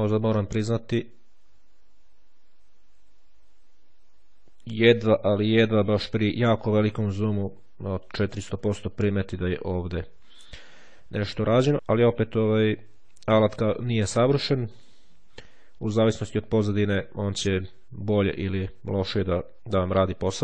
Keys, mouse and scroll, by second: 0.4-1.1 shift+scroll down 2, 1.1-2.1 shift+scroll up 2, 2.2-2.7 shift+scroll down 2, 3.3-3.8 shift+scroll up 2, 4.1-4.5 scroll down 2, 4.7-5.7 ctrl+scroll up 2, 12.4-15.1 drag.